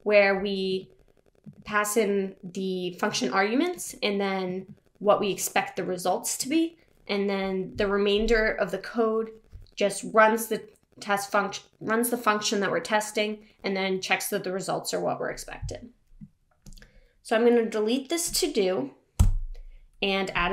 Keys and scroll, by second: 19.3 BackSpace.